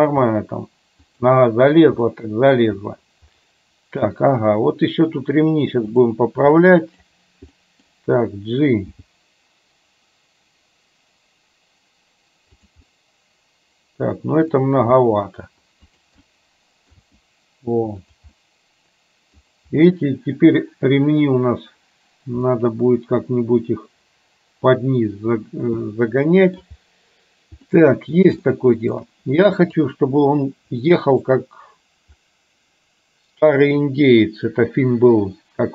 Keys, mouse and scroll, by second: 0.1 g, 2.1-2.6 middle drag, 6.1 click, 6.6 middle click, 7.7 middle click, 9.0 g, 13.0-14.6 middle drag, 14.6 scroll down 1, 14.9 g, 16.2 scroll up 1, 16.4 middle click, 17.1 g, 18.4-19.5 middle drag, 22.6-26.7 middle drag, 27.7-28.2 middle drag, 28.5 shift+middle click, 29.7 KP_3, 31.0 middle click.